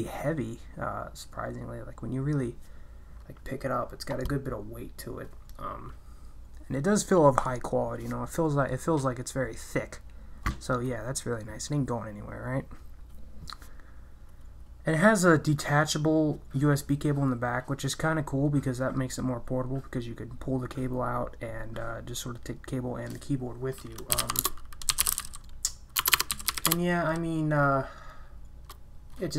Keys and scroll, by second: 23.9-26.8 typing.